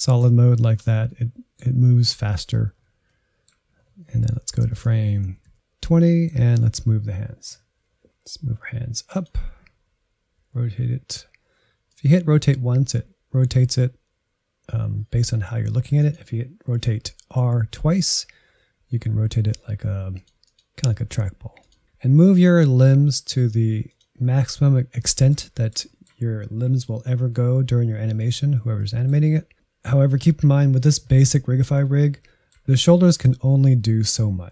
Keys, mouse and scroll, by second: 4.4-5.1 Right, 5.4 Right, 5.5 Right, 5.8-8.8 middle drag, 8.8 click, 9.0 shift+middle click, 9.7 g, 10.4 r, 13.1 r, 17.4 r, 20.5 r, 20.8 middle click, 21.0 g, 21.2 middle click, 21.3 g, 21.6 middle click, 21.8 g, 24.2 middle click, 24.6 scroll up 2, 24.9 shift+middle click, 25.2 scroll up 1, 25.3 g, 25.6 shift+middle click, 25.7 scroll up 1, 25.8 middle click, 26.1 click, 26.3 shift+middle click, 26.8-27.3 scroll up 1, 27.3 middle click, 27.4 scroll up 1, 27.8-32.6 typing, 28.5 middle click, 28.9 middle click, 29.3 middle click, 29.4 click, 29.5 shift+middle click, 30.1 middle click, 30.5 middle click, 30.6 click, 31.2 middle click, 31.6 middle click, 31.9 middle click, 32.3 middle click, 32.7 middle click, 32.9 click, 33.0 middle click, 33.6 scroll up 2, 33.9 click, 34.0 shift+middle click, 34.3 r.